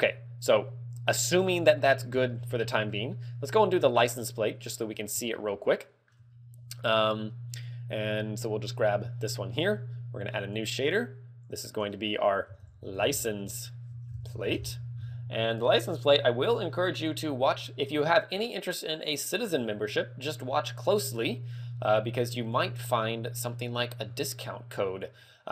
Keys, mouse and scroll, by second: 0.4 middle click, 1.7 scroll down 1, 2.5 scroll down 2, 2.5 shift+middle click, 3.4 middle click, 5.4 shift+middle click, 8.5 right click, 10.5 click, 11.5 click, 11.9 click.